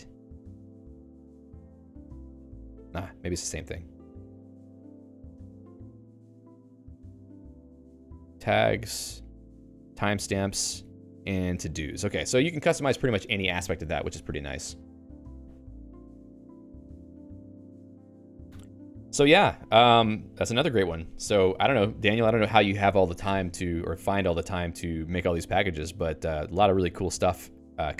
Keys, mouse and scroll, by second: 0.6 Up, 2.6-4.6 Down, 6.6 Down, 8.5 Up, 8.7 Up, 8.8 Up, 9.3 Down, 9.5 Down, 9.7 Down, 10.5 Down, 10.8 Down, 11.0 Down, 19.7 q, 24.1 Escape, 26.1 Escape.